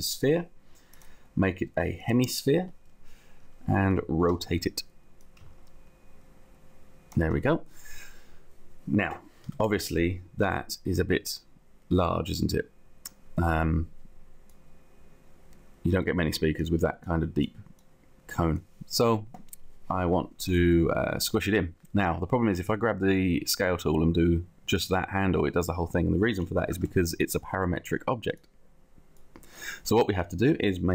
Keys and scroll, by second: 4.3 r, 9.3 space, 10.5 t, 26.5 ctrl+z.